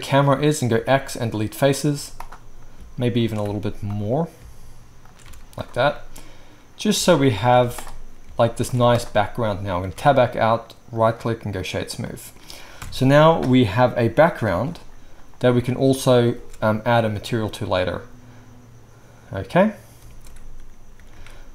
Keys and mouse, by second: 0.7 x, 1.9 z, 3.3-4.9 alt+shift+right drag, 3.4 x, 5.2 x, 7.3 alt+shift+click, 8.2 shift+x, 8.8 x, 9.9 Tab, 12.0-17.1 right drag, 12.8 KP_0, 14.6 alt+a, 16.4 space, 20.0 space, 21.0 ctrl+s, 21.1 ctrl+s, 21.1 ctrl+right click.